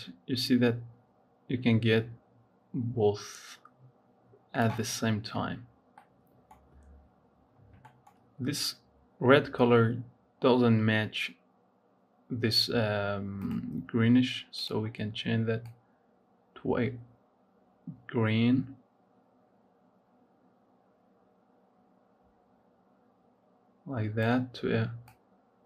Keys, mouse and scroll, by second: 5.3-5.9 scroll up 3, 5.9 middle click, 6.4-7.7 scroll up 4, 7.7-9.4 shift+middle drag, 9.4 scroll down 1, 9.8 scroll up 2, 13.2 click, 14.4 click.